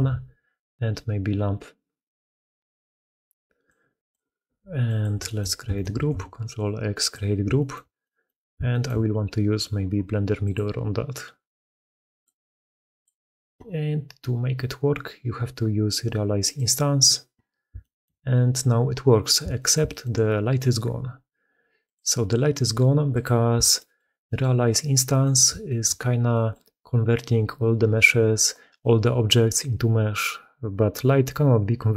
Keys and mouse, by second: 4.3 g, 6.0 ctrl+x, 7.4 shift+click, 7.9-8.2 drag, 8.6 shift+click, 10.3-12.9 drag, 16.3 click, 17.7 shift+drag, 19.4 shift+middle click, 19.7 middle click, 21.7 middle click, 23.0 middle click, 23.6 shift+middle click, 24.1 middle click, 25.1 middle drag, 25.5 shift+middle click, 26.2 middle click, 28.7 middle click.